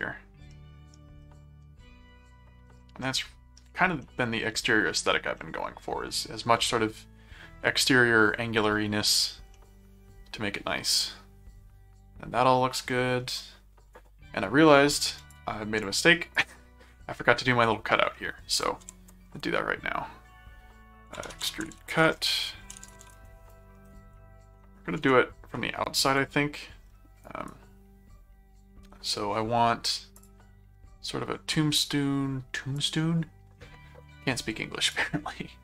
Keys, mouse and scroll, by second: 0.5 middle click, 1.2 middle click, 2.8 middle click, 4.0 middle click, 5.4 middle click, 8.6 middle click, 9.6-12.8 middle drag, 15.3 click, 16.4 click, 18.6 click, 18.8 s, 20.9-23.4 typing, 23.9 Return, 25.0 ctrl+3, 26.0 click, 27.2 right click, 30.1 click, 32.7 click, 34.9 click.